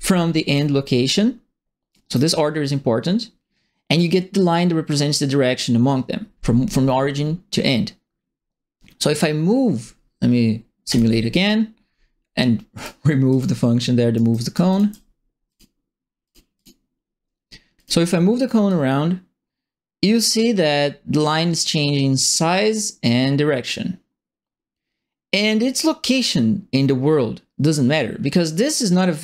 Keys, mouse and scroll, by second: 0.4 click, 1.9 right click, 10.8 right click, 12.7 click, 13.3 click, 14.1 right click, 14.7 alt+click, 15.4 click, 16.2 click, 16.5 click, 17.8 click, 18.6-29.2 drag.